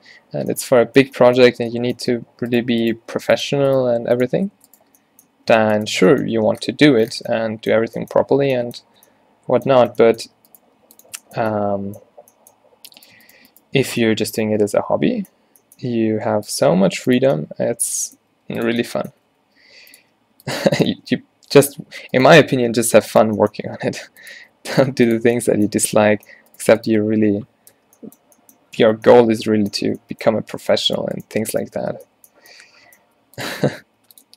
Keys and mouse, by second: 2.1 Tab, 2.1-6.0 typing, 2.6-4.9 right drag, 4.4 Tab, 4.6 Tab, 6.4 Tab, 7.2 Tab, 8.4 Tab, 8.9 Tab, 10.5 click, 10.7 g, 13.0-15.4 drag, 15.9 e, 16.7 e, 18.4-21.1 typing, 22.9 g, 23.6 r, 24.4 r, 24.9 g, 27.8 f, 29.0 Tab, 29.9 Tab, 32.0 b, 33.1-34.3 typing.